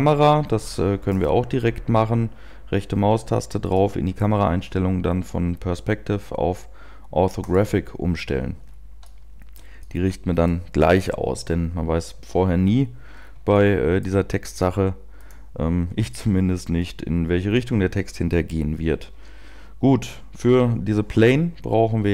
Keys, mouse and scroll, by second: 1.1 right click, 1.7 right click, 3.6 click, 7.4 click, 8.7-9.2 scroll down 2, 9.1 shift+middle click, 9.7 middle click, 12.4 right click, 12.5 KP_7, 13.2-14.2 scroll down 2, 13.6 shift+middle click, 14.5 g, 15.4 click, 16.0 scroll up 1, 16.7-17.0 scroll up 2, 17.4 scroll down 1.